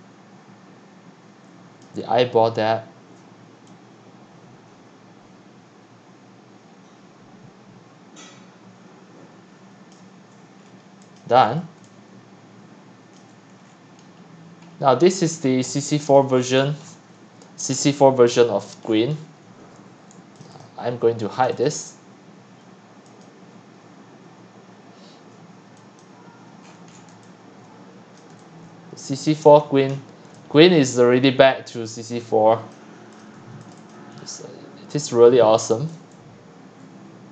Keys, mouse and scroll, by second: 1.8-4.8 drag, 9.9 click, 10.3-11.0 scroll, 11.2 click, 11.4-11.8 scroll, 11.8-13.3 c, 13.5 click, 14.1-15.3 scroll down 12, 15.3 scroll up 4, 15.6 x, 16.2 click, 16.6-17.2 scroll down 14, 17.7 scroll, 17.9 click, 18.8-19.4 scroll, 20.6-24.3 drag, 26.6-27.1 scroll, 27.1-28.4 typing, 28.2 click, 29.1 click, 29.3-30.3 scroll down 26, 30.8-31.9 typing, 32.7 click, 33.4-35.4 typing, 33.7 click, 33.9 click, 35.9-36.9 drag, 36.9-37.3 typing.